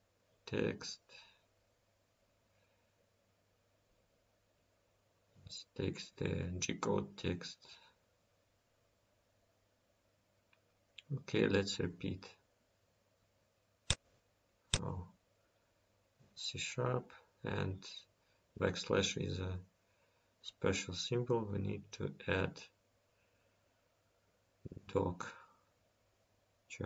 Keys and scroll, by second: 9.2 ctrl+s, 22.4 ctrl+s.